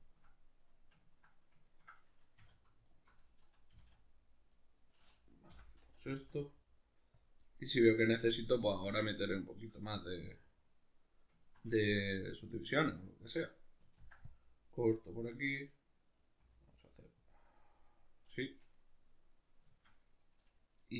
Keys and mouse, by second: 2.4 2, 2.8 alt+right click, 3.2-4.6 middle drag, 3.7 g, 4.6 right click, 5.5 o, 7.3 click, 7.4-15.4 middle drag, 14.0 ctrl+r, 15.4 click, 15.5-20.1 middle drag, 16.4 r, 17.4 click, 20.1 right click, 20.4-20.9 middle drag.